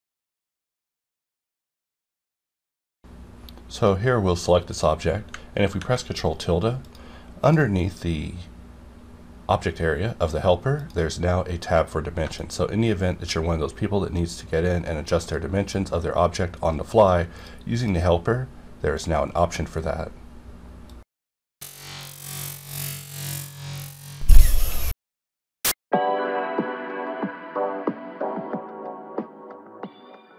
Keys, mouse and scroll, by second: 5.3 ctrl+Num_Lock, 5.3-5.6 scroll up 1, 5.6 ctrl+`, 6.8 click, 10.8 click, 12.4-15.1 shift+drag, 15.1 right click, 15.6-17.2 drag, 17.2 right click, 17.8-19.3 drag, 19.3 right click, 29.9 middle click.